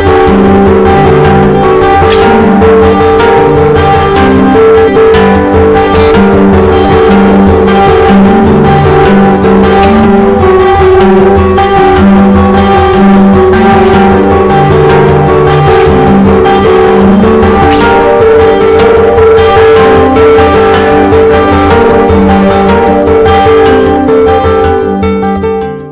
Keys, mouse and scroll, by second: 1.0 click, 10.1 Escape.